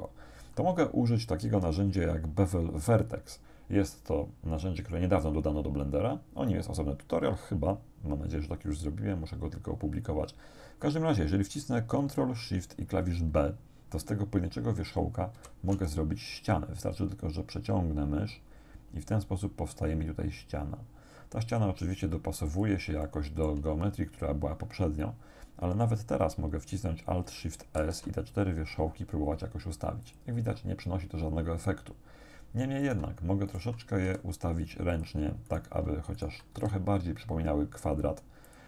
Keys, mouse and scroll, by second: 15.4 ctrl+shift+b, 22.5 click, 23.1 shift+middle click, 27.8 alt+shift+s, 30.1 click, 32.8 shift+right click, 33.5 shift+right click, 34.1 shift+g, 35.0 click, 35.5 right click, 36.2 shift+right click, 36.6 shift+g, 38.5 click.